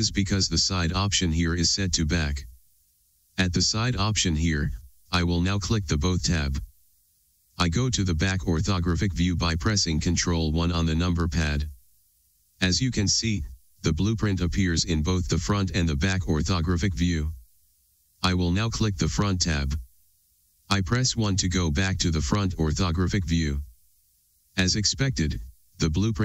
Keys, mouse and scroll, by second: 6.6 click, 9.9 ctrl+KP_1, 20.4 KP_1, 22.4-23.2 drag.